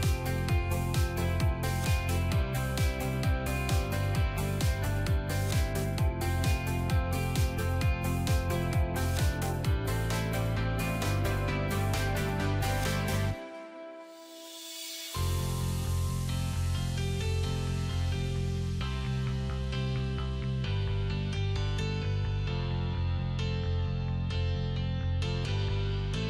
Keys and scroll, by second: 21.9 alt+r.